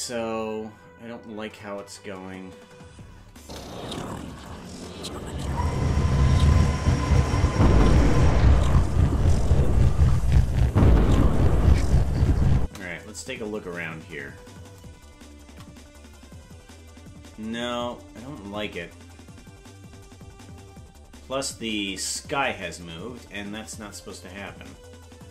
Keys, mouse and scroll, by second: 1.7 KP_0, 3.4 space, 5.2-6.9 scroll down 27, 12.6 space, 15.4 shift+`.